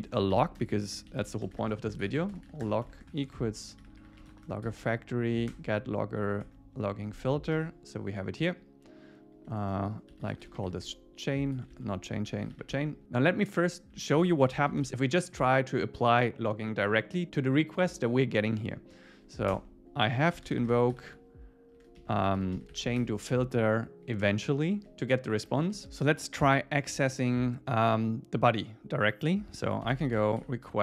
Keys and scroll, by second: 0.3 alt+8, 0.6 Return, 4.5 Return, 6.5 Tab, 7.5 super+s, 10.7 Escape, 11.6 alt+Right, 11.9 alt+shift+Left, 12.7 Escape, 14.1 shift+super+Left, 19.5 Return, 23.0 Escape, 24.8 super+s, 25.5 Up, 25.8 super+Right, 26.4 Return.